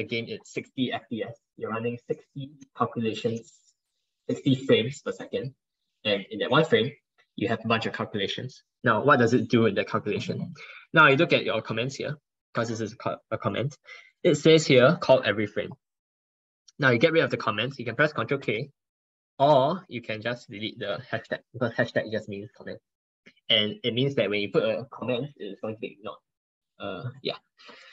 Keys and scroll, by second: 18.3 ctrl+k.